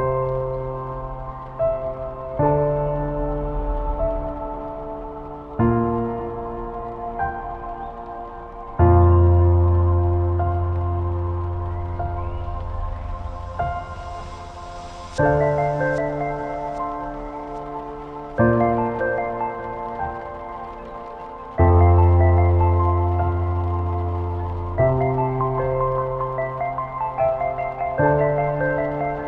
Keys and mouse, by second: 0.1-0.4 shift+middle drag, 1.0 shift+click, 1.9 Tab, 3.4 KP_Decimal, 3.8 ctrl+s, 5.9 KP_1, 7.4 z, 7.7 1, 8.1 a, 8.8 c, 15.5 z, 15.7-16.1 drag, 16.5 shift+drag, 17.0 shift+d, 17.9 click, 19.2 p, 19.9 Tab, 20.5 shift+drag, 21.5 Tab, 22.0 a, 22.7-23.0 drag, 23.1 shift+click, 24.0 click, 25.0-26.5 shift+drag, 27.8 click, 28.8 middle click.